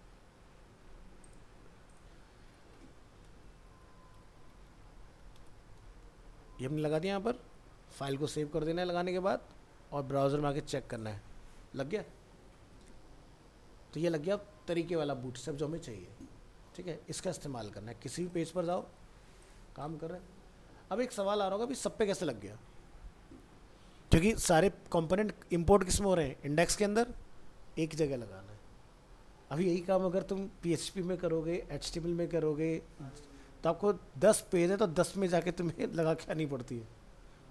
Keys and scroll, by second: 3.3 ctrl+Home, 5.7 ctrl+v.